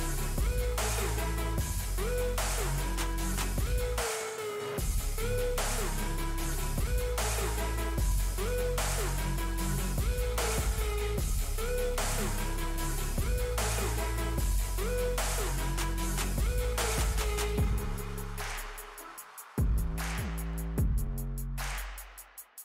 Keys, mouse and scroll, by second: 4.7 shift+right click, 5.3 click, 8.9 space, 9.3-14.4 drag, 16.2-22.6 drag.